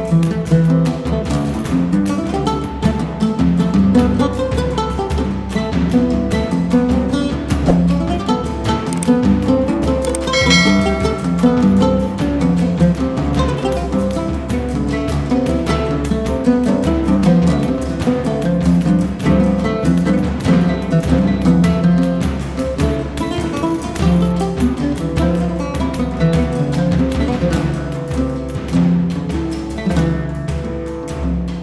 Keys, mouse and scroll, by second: 5.9-16.4 drag, 8.9 typing, 16.4-20.3 drag, 20.1 typing, 22.6-27.8 drag, 23.6 typing, 27.9-31.6 drag.